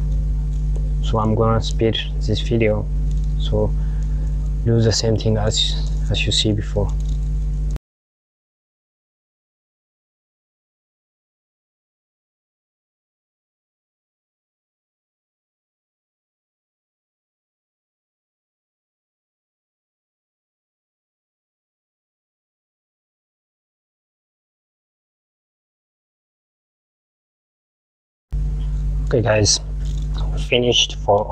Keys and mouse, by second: 8.1 alt+click, 8.4 e, 9.3 alt+click, 9.5 s, 10.1 e, 10.9 alt+click, 11.0 s, 12.0 alt+click, 12.1 e, 12.7 alt+click, 12.8 s, 13.7 alt+click, 13.8 s, 14.6 click, 14.9 alt+click, 15.1 e, 15.6 s, 16.1 alt+click, 16.3 e, 16.9 alt+click, 17.1 s, 18.0 alt+click, 18.1 e, 18.7 click, 19.1 alt+click, 19.4-27.9 typing, 20.0 alt+click, 20.6 click, 21.5 alt+click, 22.2 alt+click, 22.9 alt+click, 23.4 click, 24.5 alt+click, 25.0 click, 26.5 alt+click, 27.1 alt+click, 27.8 alt+click, 29.1 click.